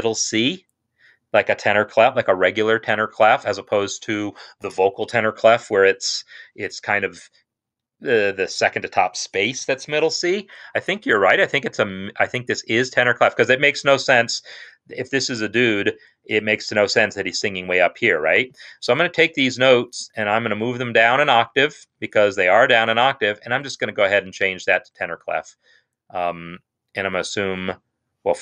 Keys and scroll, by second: 21.6 ctrl+Down.